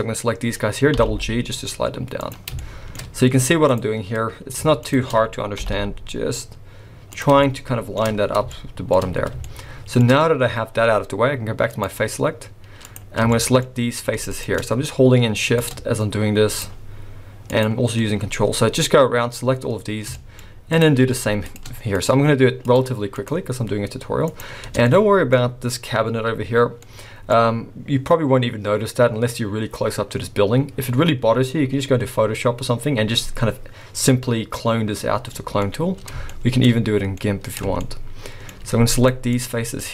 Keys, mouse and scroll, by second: 1.0 g, 2.5 scroll down 2, 2.6 shift+middle click, 2.9-3.7 shift+scroll up 1, 3.7 click, 3.9 scroll up 2, 4.8 shift+click, 5.1 scroll down 2, 5.6 g, 7.4 shift+middle click, 8.1-8.5 scroll down 5, 8.5 shift+middle click, 9.5 shift+middle click, 11.7 click, 12.3 scroll up 1, 12.8 click, 13.3 shift+middle click, 14.3 ctrl+shift+click, 15.5 click, 16.5 shift+click, 17.5 shift+click, 20.1 shift+middle click, 20.1 shift+scroll up 1, 20.7 shift+click, 21.5 ctrl+shift+click, 21.9 shift+click, 22.6 shift+click, 23.2 shift+click, 24.2 shift+click, 24.9 shift+middle click, 25.3-26.8 shift+scroll up 2, 26.8 middle click, 29.1 scroll down 3, 30.7-32.2 scroll up 2, 35.2 scroll down 2, 35.7 middle click, 36.3 shift+middle click, 36.6-36.9 shift+scroll up 3, 37.2 middle click, 37.8 shift+middle click, 38.5 scroll up 1, 39.0 shift+click, 39.3 shift+click.